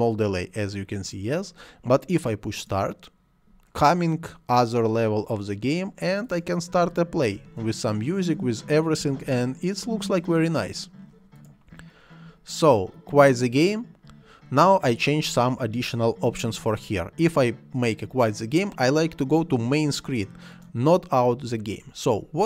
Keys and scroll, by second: 7.3 space, 9.0 space.